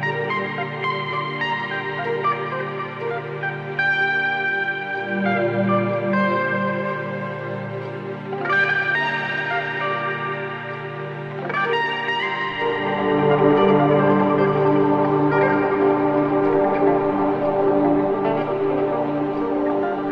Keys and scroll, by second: 11.5 a.